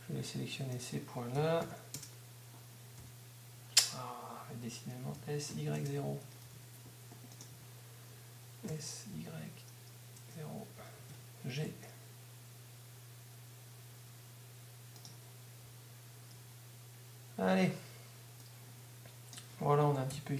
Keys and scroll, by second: 1.1-6.7 typing, 20.1 F12.